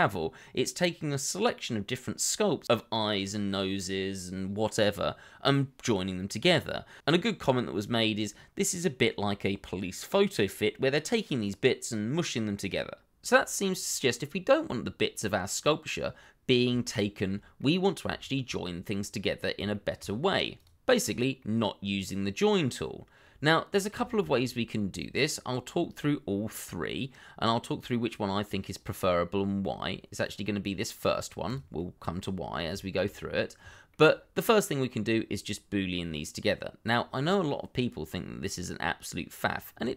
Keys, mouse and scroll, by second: 1.4 d, 1.7 click, 5.1 d, 5.8 middle click, 6.8 ctrl+z, 7.3 middle click, 8.8 shift+middle click, 14.7 middle click, 17.5 middle click, 18.1 shift+middle click, 19.7 shift+middle click, 20.2 scroll up 1, 21.4 middle click, 23.7 scroll down 1, 24.0 shift+middle click, 24.3-24.6 scroll up 1, 25.0-27.0 scroll down 1, 28.7-29.3 scroll up 1, 29.3 scroll down 1, 29.6 middle click, 30.6 double click, 32.2-32.7 scroll up 1, 32.7 shift+middle click.